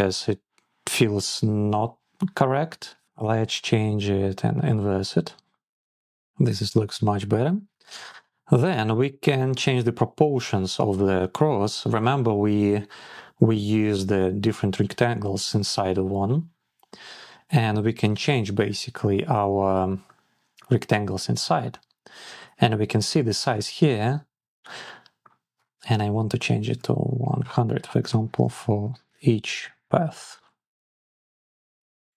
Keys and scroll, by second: 27.2 Return, 31.1 Return.